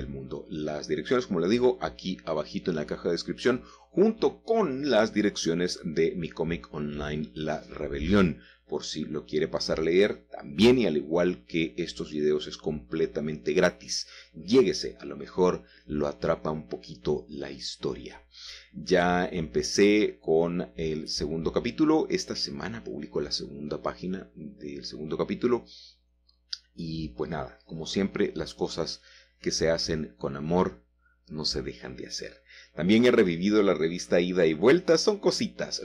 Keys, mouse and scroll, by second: 0.8 g, 1.3 z, 4.1 shift+click, 4.6 Tab, 4.9-5.3 scroll down 2, 5.3 middle click, 6.3 middle click, 6.3-6.9 scroll down 1, 7.0 middle click, 7.1 middle click, 7.8-8.2 scroll down 2, 8.4-10.2 shift+scroll down 3, 8.7 shift+middle click, 8.9-10.2 shift+middle drag, 10.5-12.2 middle drag, 13.4 alt+h, 14.1 middle click, 16.6-18.2 middle drag, 18.4-19.4 shift+middle drag, 19.7 shift+middle click, 19.8-20.8 shift+scroll up 1, 21.1 shift+middle click, 23.8 shift+middle click, 25.4 shift+middle click, 28.5 middle click, 28.5-29.2 scroll up 2, 29.5-30.6 shift+middle drag, 30.6-31.4 scroll down 2, 31.0-32.6 shift+middle drag, 33.5-34.1 scroll down 3, 34.1-35.8 shift+middle drag.